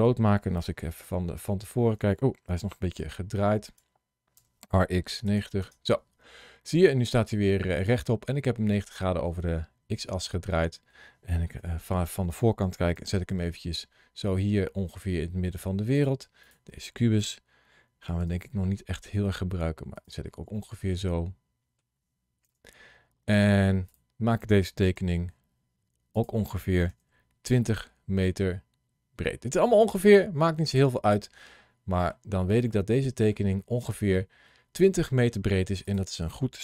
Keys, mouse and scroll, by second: 0.6 KP_1, 2.9 alt+r, 4.2 r, 4.5 x, 5.0 KP_9, 5.1 KP_0, 5.4 KP_Enter, 6.7 middle click, 11.4 KP_1, 12.8 g, 15.8 click, 16.3 click, 18.1 g, 19.8 click, 20.4 middle click, 22.3 KP_1, 23.7 click, 24.8 s, 26.0 click, 26.7 g, 30.5 click, 31.0 middle click, 32.5 middle click, 35.7 click.